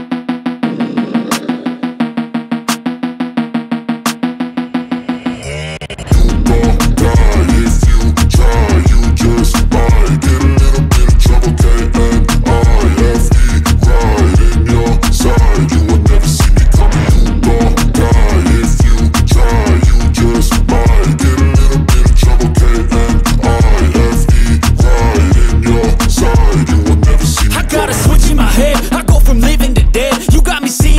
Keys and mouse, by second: 1.1 b, 5.2 b, 6.1 b, 6.8 b, 9.5 b, 14.1 click, 16.1 click, 19.1 click, 20.7 click, 23.9-25.8 drag, 25.8-26.3 [, 26.4 click, 26.9 ctrl+z, 27.7 click, 28.4-30.0 typing, 28.6 click, 29.2 ctrl+z, 29.5 click, 30.2 click, 30.7 ctrl+z.